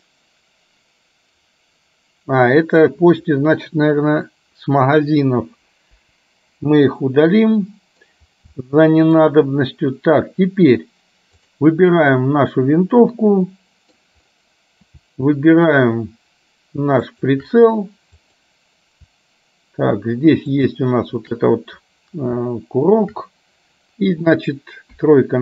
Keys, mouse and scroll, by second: 6.0 Delete, 7.2-8.2 middle drag, 8.7 shift+middle click, 11.5 click, 12.1-14.1 middle drag, 18.2 click, 20.6 shift+click, 25.0 KP_3.